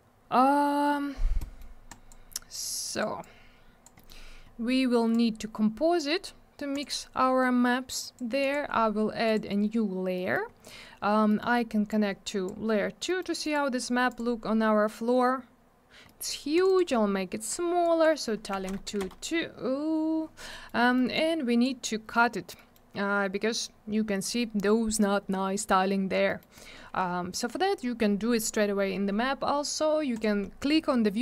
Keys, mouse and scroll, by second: 1.4 middle click, 1.9 click, 2.5 click, 2.9 click, 3.0 click, 3.2 click, 3.9 middle click, 4.0 middle click, 4.4-5.0 scroll down 1, 5.1 click, 6.7 click, 6.8 click, 7.9 click, 8.4 click, 8.5 click, 9.2 click, 9.3 click, 10.1 middle click, 10.3 middle click, 10.5-11.0 scroll up 1, 11.3 middle click, 11.4 middle click, 11.9 click, 13.0 middle click, 13.1 middle click, 13.4 right click, 13.5 double right click, 14.1 click, 14.1 click, 16.0 middle click, 16.2 middle click, 16.5 click, 16.6 click, 16.6 click, 16.7 double click, 17.8 click, 18.5 2, 18.7 Return, 18.7 Tab, 18.8 2, 19.0 Return, 20.5 middle click, 20.6 middle click, 20.8 middle click, 20.9 double middle click, 21.1 click, 22.5 middle click, 22.7 middle click, 26.2 middle click, 26.4 middle click, 30.1 click, 30.2 click.